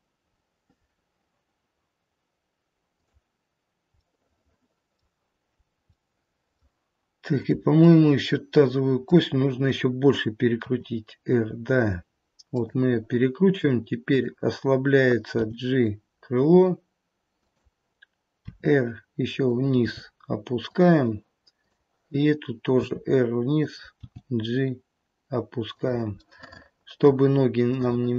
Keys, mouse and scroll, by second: 0.3-1.3 scroll down 3, 3.0 click, 4.0 middle click, 5.5-6.9 scroll up 2, 5.8 middle click, 7.2 click, 8.0 middle click, 8.6 middle click, 10.6 r, 14.0 click, 15.4 g, 19.9 r, 19.9 g, 21.6 click, 22.7 r, 23.9 g, 26.1 middle click, 26.9 middle click, 27.7 middle click.